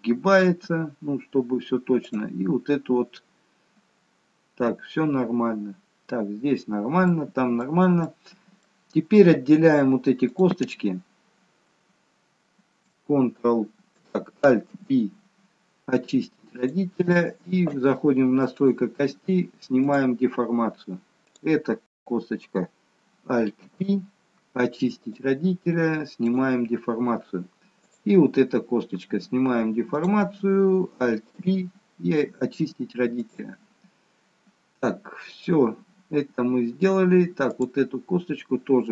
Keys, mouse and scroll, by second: 2.1 click, 6.9-7.4 scroll down 1, 7.4 middle click, 8.1 middle click, 10.2 click, 14.7 alt+p, 18.6 click, 19.9 click, 23.6 alt+p, 26.2 click, 27.7 click, 31.3 alt+p, 34.6-35.3 scroll up 1, 35.3 middle click, 35.3-36.7 scroll up 1, 37.4 click.